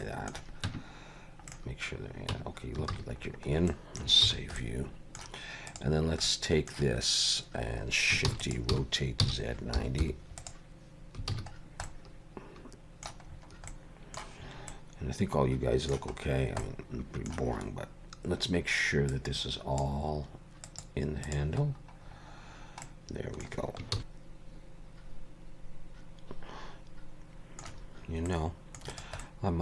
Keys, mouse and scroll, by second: 0.0 middle click, 0.7 Tab, 1.5 middle click, 1.6 scroll up 1, 2.3 Tab, 2.9 alt+a, 3.2 scroll down 3, 3.7 middle click, 4.3 ctrl+s, 4.6 middle click, 5.7 click, 6.3 middle click, 8.4 shift+d, 8.7 r, 11.4 alt+a, 11.6 scroll down 2, 11.9 middle click, 13.3-13.7 scroll up 4, 13.7 middle click, 14.4 scroll up 2, 14.7 middle click, 16.4 scroll down 1, 16.6 middle click, 19.1 click, 20.7 click, 21.3 click, 21.7-22.7 scroll down 11, 22.9 middle click, 24.0 ctrl+s, 28.3 middle click, 28.9 click, 29.2 middle click.